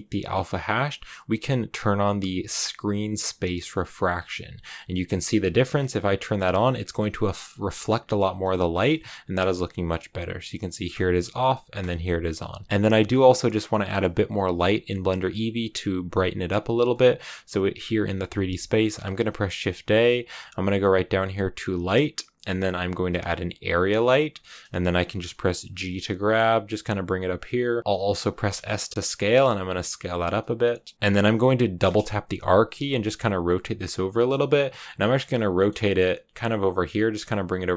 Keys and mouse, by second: 3.6 click, 5.0 click, 5.4 shift+click, 6.7 click, 7.3 click, 7.7 click, 8.8 shift+middle click, 10.8 click, 11.7 click, 16.7 click, 18.3 shift+a, 25.5 g, 28.0 click, 28.2 s, 30.4 click, 31.7 r, 31.8 r, 33.7 click, 34.0 g, 34.3 click, 34.5 r, 34.6 r, 35.0 click, 35.2 click, 35.2 middle click, 35.3 click, 35.7 click, 36.1 g, 36.4 click, 36.8 click, 37.1 r, 37.4 click.